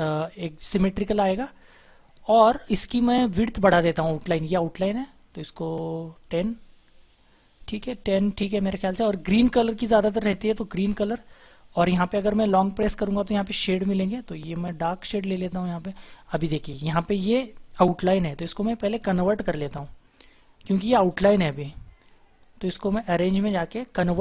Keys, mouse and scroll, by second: 7.5-8.1 scroll up 1, 8.1-9.2 scroll down 1.